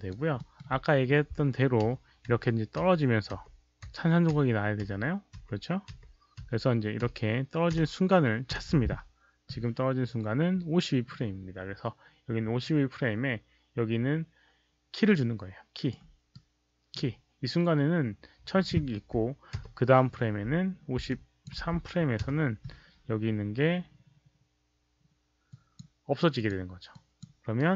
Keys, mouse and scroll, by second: 0.3 alt+middle click, 0.5 click, 0.7 click, 10.6 alt+middle click, 15.0 right click, 16.3-16.9 right drag, 21.0-21.4 alt+drag, 21.7 right click, 25.4 alt+drag, 26.3 alt+click, 26.9 alt+drag, 27.5 right click.